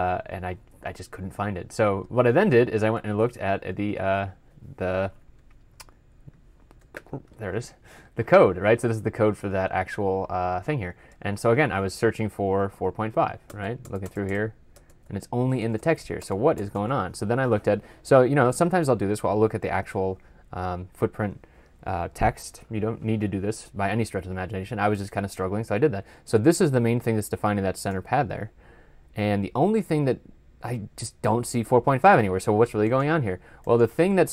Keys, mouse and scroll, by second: 6.9 ctrl+F12, 11.4 ctrl+f, 12.5-13.5 typing, 13.7 Return, 13.9 Return, 14.1 Return, 14.6 Return, 14.9 Return, 15.5 Return, 15.6 Return, 16.1 Return, 16.4 Return, 16.6 Return.